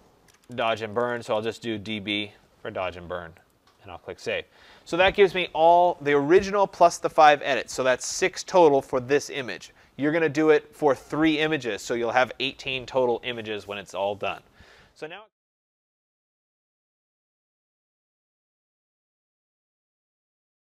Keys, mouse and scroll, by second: 0.2-2.3 typing, 3.4 click.